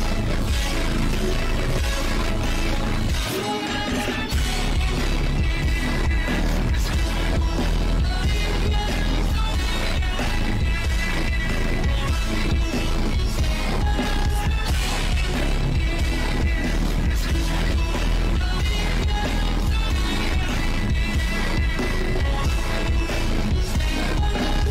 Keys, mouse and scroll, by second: 0.0 shift+`, 0.9 click, 1.4 click, 1.8 click, 2.5 shift+`, 3.4 shift+`, 3.6 click, 3.8 click, 4.1 click, 4.7 shift+`, 6.2 shift+`, 7.7 click, 9.4 click, 9.7 click, 10.4 ctrl+z, 10.5-11.7 drag, 11.8 ctrl+z, 12.0 shift+`, 12.5-13.9 drag, 13.9 shift+`, 14.4 click, 15.0 click, 15.5 shift+`, 16.1 click, 17.0-17.4 drag, 18.9 click, 20.0 click, 22.1 click, 22.3 click, 22.8 shift+`.